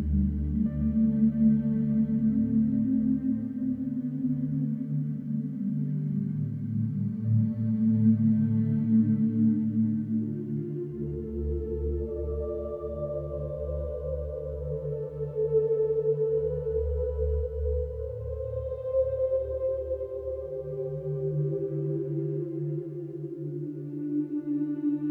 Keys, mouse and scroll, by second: 0.8 right click, 1.4-2.6 middle drag, 2.6 click, 3.1 shift+click, 3.4 shift+click, 3.7 shift+click, 4.0-5.2 middle drag, 5.2 e, 7.0 Tab, 7.2 scroll down 2, 7.5-8.2 middle drag, 8.2 scroll down 2, 8.4-9.0 middle drag, 9.0 Tab, 9.4-9.8 scroll up 2, 9.8 shift+middle click, 10.6 scroll up 1, 11.3 ctrl+r, 12.6 alt+middle click, 12.8 alt+middle click, 13.1 shift+middle click, 13.3-13.8 scroll up 3, 14.1 click, 15.4 click, 19.7-21.0 middle drag, 21.0 click, 21.3 click, 21.5 shift+click, 22.1 e, 23.3 alt+middle click, 23.5 alt+middle click, 23.9-25.1 middle drag.